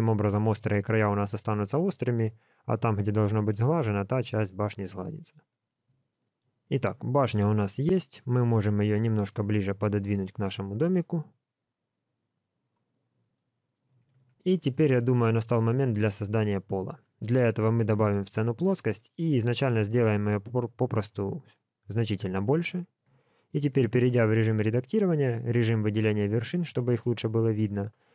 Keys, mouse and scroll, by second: 0.4 alt+a, 1.2 scroll up 3, 2.0 scroll down 3, 2.3 middle click, 3.5 middle click, 5.0 scroll down 1, 6.1 shift+middle click, 7.3 KP_1, 8.2 click, 9.3 g, 13.0 scroll down 2, 13.3 middle click, 14.1 alt+a, 14.4-14.9 scroll up 1, 14.9 scroll up 1, 15.9 scroll up 1, 16.1 shift+middle click, 16.8-17.2 scroll down 1, 17.3 shift+a, 18.8 scroll down 2, 19.5-20.4 scroll down 3, 19.5 s, 23.0 Tab, 23.9 1, 27.8 KP_7.